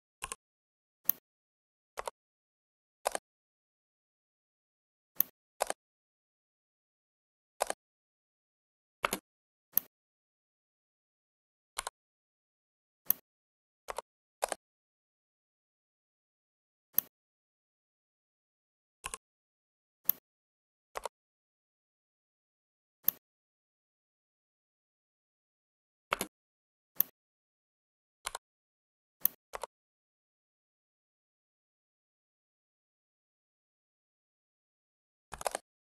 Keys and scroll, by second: 8.9 space, 26.1 space, 35.2 typing.